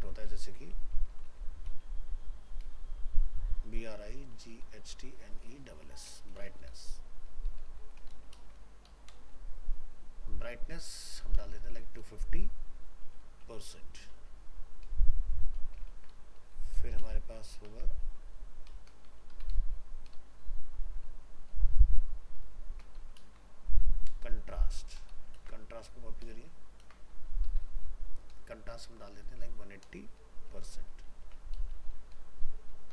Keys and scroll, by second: 8.4 ctrl+space, 15.9 ctrl+c, 17.1 ctrl+v, 20.2 ctrl+shift+Left, 21.1 ctrl+shift+Right, 22.5 ctrl+shift+Left, 23.2 ctrl+space, 25.1 ctrl+shift+Left, 25.4 ctrl+c, 26.3 ctrl+shift+Left, 26.8 ctrl+v.